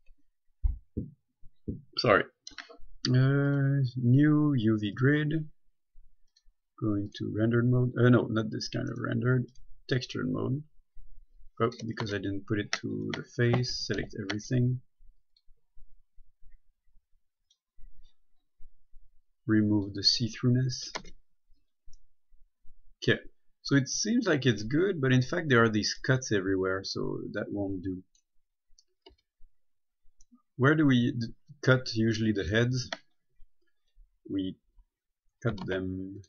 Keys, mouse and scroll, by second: 3.7 click, 11.7-12.0 scroll down 1, 12.0 right click, 12.3 Tab, 14.2 typing, 15.5 click, 18.7 scroll up 1, 18.9-20.0 scroll down 1, 20.0 click, 20.6 middle click, 21.2 Tab, 22.2 middle click, 25.1-26.3 scroll up 1, 26.3 middle click, 28.8-29.3 scroll down 1, 29.3 Tab, 30.5 middle click, 33.4 scroll down 1, 35.9 ctrl+Tab.